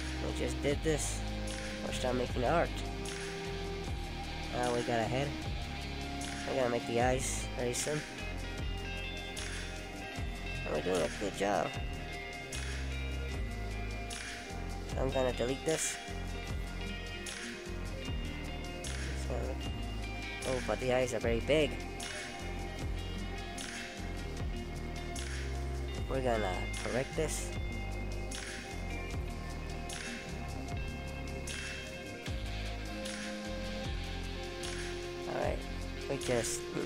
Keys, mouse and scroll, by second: 0.8 click, 1.4 middle click, 2.5-3.3 scroll up 1, 3.4 middle click, 5.7 click, 6.4 click, 6.9 shift+click, 7.5 shift+click, 8.4 shift+click, 9.1 right click, 13.9 middle click, 19.7 ctrl+z, 22.1 click, 22.9 click, 24.1 right click, 28.6 middle click, 32.3-32.7 scroll up 1, 32.7-33.2 scroll down 2, 33.2 scroll up 2, 33.7-34.6 scroll down 2, 34.6 middle click, 35.3-35.8 scroll up 1.